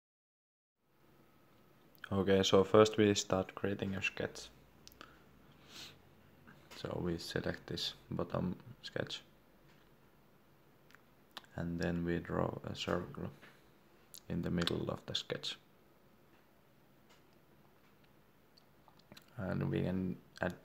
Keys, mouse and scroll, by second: 5.4 shift+middle click, 7.4 click, 8.5 middle click, 11.6 click, 20.4 Escape.